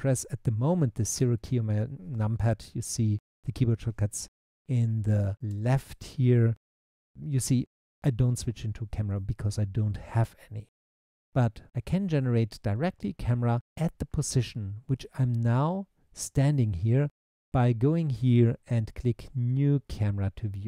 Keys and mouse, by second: 1.2 KP_0, 5.5 KP_0.